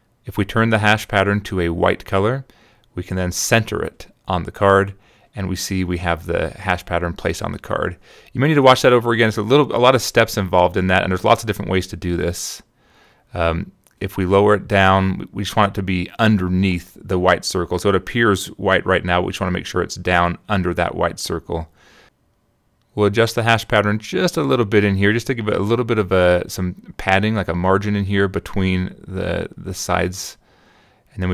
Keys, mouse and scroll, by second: 2.6 shift+click, 4.5 click, 5.0 click, 8.3 middle click, 8.8 click, 9.0 middle click, 9.2 middle click, 9.4 click, 12.9 click, 17.9 click, 18.7 click, 19.1 click, 21.1 click, 23.9 click, 25.9-29.0 shift+drag, 30.1 shift+click.